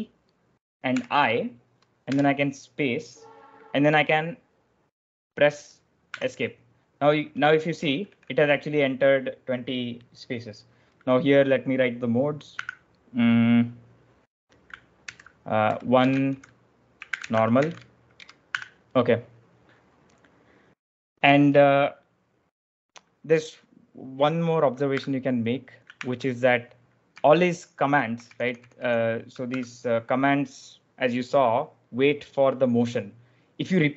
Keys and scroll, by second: 0.8 i, 2.0 space, 6.1 Escape, 7.9 shift+i, 12.4 a, 14.9-18.4 typing, 18.4 Escape, 24.9 e, 25.9 ctrl+o, 27.1-28.3 k, 28.5 k, 28.7 k, 29.4 b.